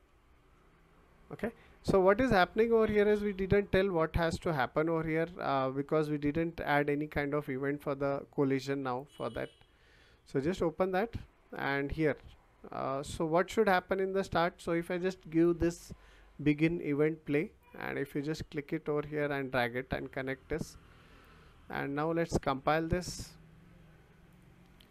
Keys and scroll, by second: 0.8 s, 2.6 Escape.